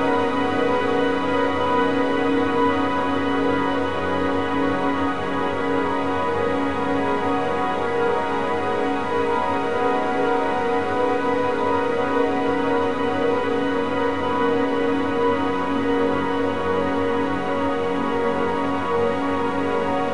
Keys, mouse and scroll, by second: 12.2 shift+`.